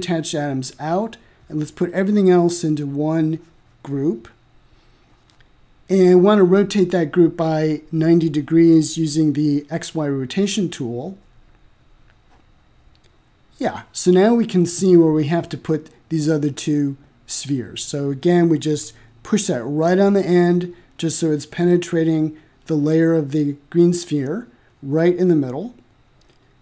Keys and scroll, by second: 10.5 9, 11.3 Return, 16.8 m.